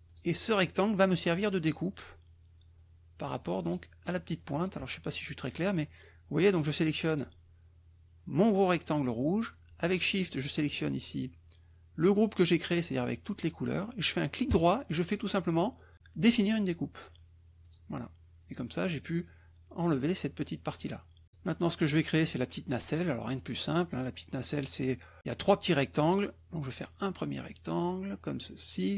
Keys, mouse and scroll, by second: 0.0 click, 3.6 shift+click, 6.5 click, 7.0 click, 10.2 shift+click, 14.5 right click, 17.0 click, 17.6 click, 21.2 middle click, 23.4 click, 23.8 middle click, 25.2 middle click, 26.5-28.9 drag.